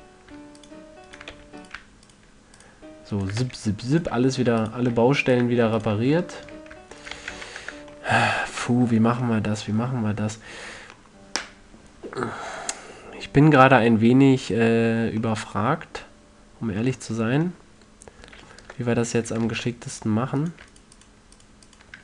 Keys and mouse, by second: 0.4 f, 1.8 f, 3.9 f, 6.9-9.2 middle drag, 7.7 f, 7.8 a, 8.1 Tab, 13.5-14.6 middle drag, 15.8-18.4 middle drag, 19.1 Tab, 20.0 ctrl+Tab.